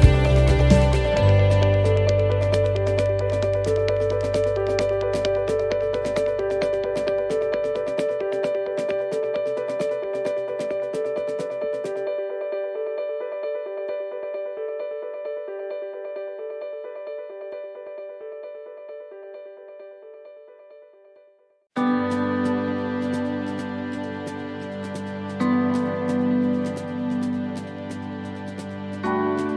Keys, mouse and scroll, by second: 3.0 right click, 4.0 l, 5.1 shift+d, 8.2 click, 10.0 click, 12.0 click, 13.9 right click, 14.7 l, 15.6 shift+d, 18.8 click, 22.1 click, 23.2 middle click, 24.2 shift+middle click, 25.7 right click, 26.3 shift+right click, 27.2 shift+right click, 28.7 shift+right click.